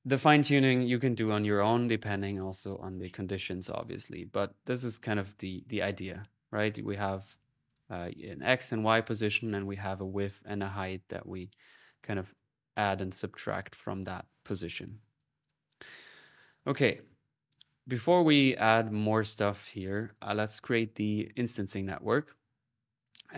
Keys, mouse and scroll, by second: 0.7 click, 4.8 middle click, 5.2 click, 7.5-8.6 drag, 10.4 middle click, 12.2-13.9 drag, 14.8 click, 15.8-16.5 typing, 16.0-20.4 ctrl+drag, 18.1-18.9 typing, 21.1-23.3 typing, 21.3-23.3 ctrl+drag.